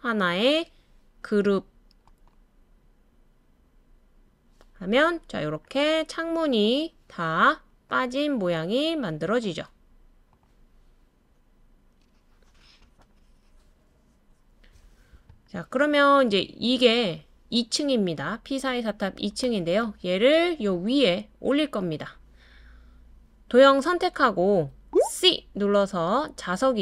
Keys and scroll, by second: 24.9 c.